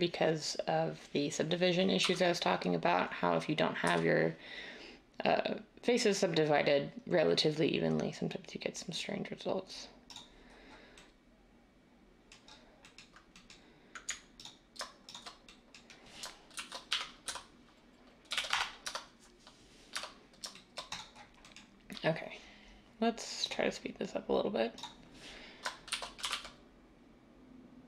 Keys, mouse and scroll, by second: 2.0 x, 3.8 x, 16.5-17.2 typing, 18.3-19.0 typing, 19.9 Tab, 25.9-26.3 typing.